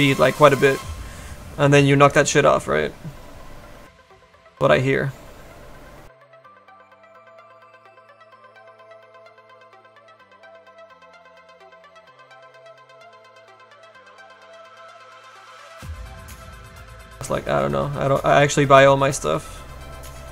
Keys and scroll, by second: 8.8 s.